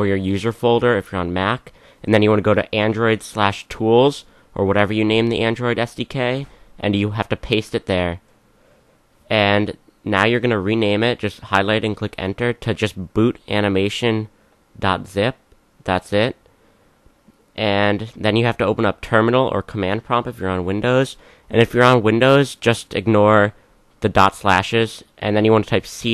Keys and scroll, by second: 6.9 v, 10.6 Right, 17.9-19.2 typing, 20.7-26.1 typing.